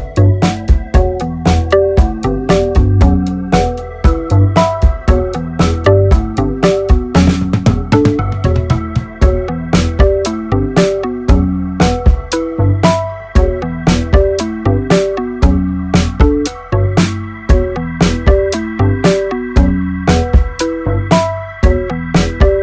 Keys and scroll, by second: 0.2 ctrl++, 1.6 ctrl+1, 2.4 ctrl++, 7.8 ctrl+z, 8.6 ctrl+z, 9.8 ctrl+1, 10.2 alt+z, 20.3 alt+z.